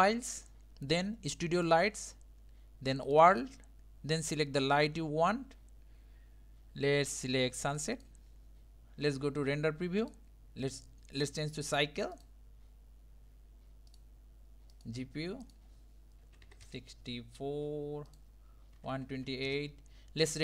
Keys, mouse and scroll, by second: 7.1 click, 10.1 click, 12.3-20.4 drag.